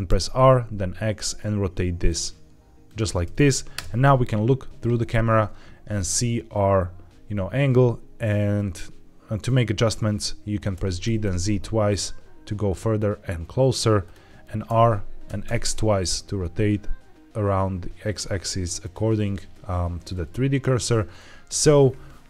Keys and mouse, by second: 0.0 r, 0.2 x, 2.7 drag, 3.6 KP_0, 10.6 g, 10.9 z, 11.1 z, 14.5 r, 15.1 x, 15.3 x.